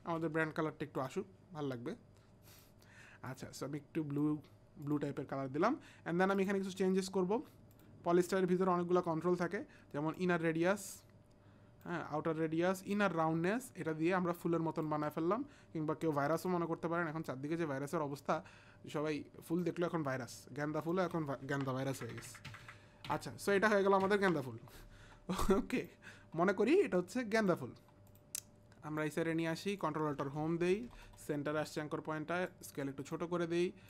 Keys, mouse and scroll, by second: 1.0 click, 2.5 click, 3.3 click, 4.8 click, 6.4 click, 10.2 click, 12.9 click, 16.4 click, 20.8 click, 22.0 Up, 22.4 Up, 22.7 Up, 23.1 Up, 23.5 Up, 25.7 click, 27.3 Up, 27.3 click, 27.4 click, 29.0 click, 30.4 ctrl+alt+Home, 31.5 s, 32.5 click.